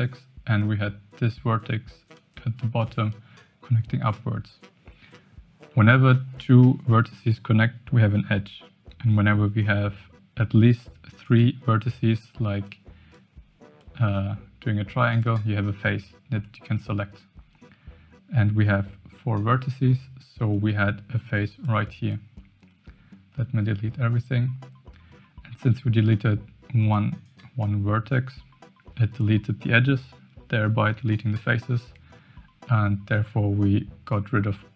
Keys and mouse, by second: 2.1 click, 3.1-4.2 drag, 12.6 click, 13.7-15.2 drag, 20.5-21.8 drag, 22.0-25.2 ctrl+drag, 26.9 click.